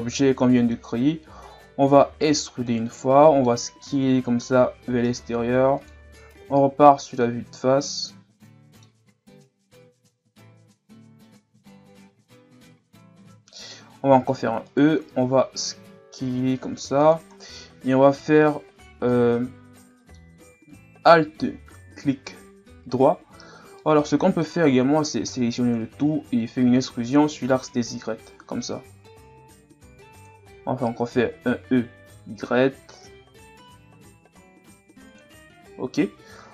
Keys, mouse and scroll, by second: 2.1 e, 3.0 middle click, 3.8 s, 6.4 KP_1, 7.8-9.1 middle drag, 9.1-9.7 scroll up 1, 9.7 s, 14.1 e, 15.1 s, 17.6-22.1 middle drag, 23.8-24.9 middle drag, 24.9 a, 25.3 a, 26.6 e, 31.1 e, 35.7 Tab.